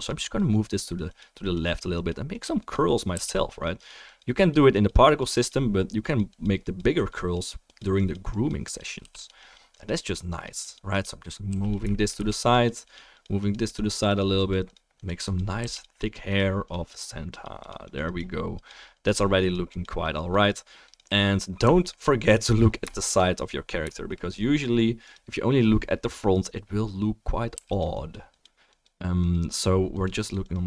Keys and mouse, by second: 3.1 f, 3.3 click, 9.0 f, 9.2 click, 11.5 f, 11.7-12.5 shift+drag, 12.3 f, 15.6 f, 15.8 drag, 21.8 alt+middle click, 22.9-23.7 shift+middle drag, 27.5 f, 27.8 click.